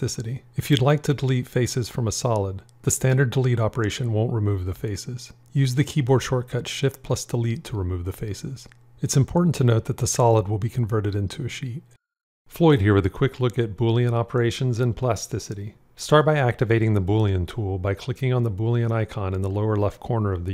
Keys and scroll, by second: 3.4 Delete, 6.8 shift+Delete.